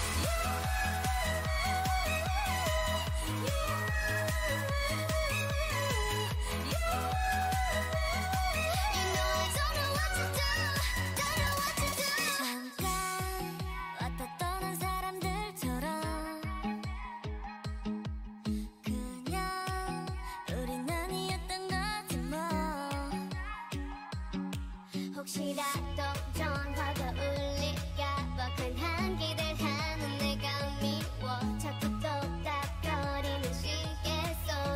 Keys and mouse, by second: 0.2-2.0 drag, 0.4 g, 3.0 click, 3.8 g, 4.7 g, 5.9 ctrl+z, 6.2 Tab, 7.9 Tab, 11.6 right click, 12.3 ctrl+e, 13.2 a, 14.0 ctrl+Tab, 15.5 KP_1, 16.4 k, 18.8 Tab, 20.0 Tab, 20.4-22.6 middle drag, 23.9 Tab, 24.5-26.0 drag, 27.0 KP_1, 27.7 Tab, 28.7 k.